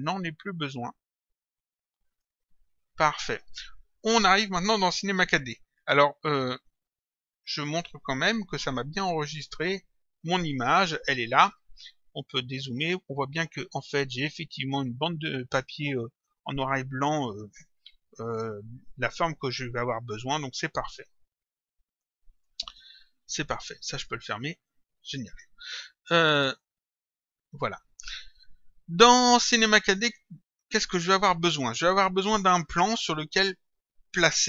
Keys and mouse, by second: 0.6 click, 2.1 click, 3.9 click, 7.9 click, 12.3 click, 22.0 click, 23.9 click, 26.5 click, 31.6 click.